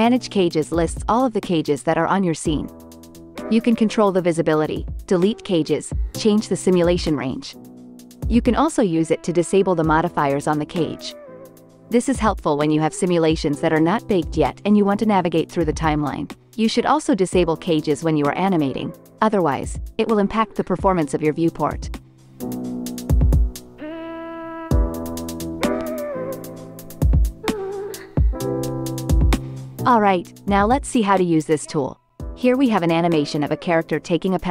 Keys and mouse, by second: 3.3 click, 3.9 click, 4.4 click, 4.9 click, 6.1 click, 6.5 click, 6.9 click, 8.0 click, 9.7-12.8 drag, 13.6-16.1 drag, 16.7 ctrl+Tab, 17.0 click, 17.9-22.0 drag, 19.3 shift+Left, 20.5 space, 22.0-22.9 middle drag, 22.0 space, 24.1-26.4 middle drag, 24.9 shift+Left, 26.6 middle click, 27.5 space, 28.9 space, 29.8 click, 30.4 space.